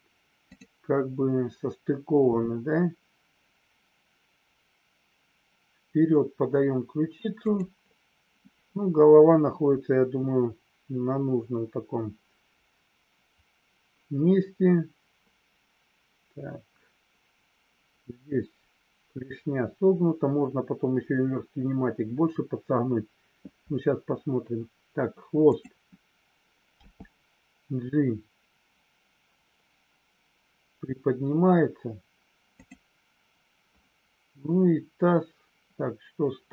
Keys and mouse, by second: 7.5 click.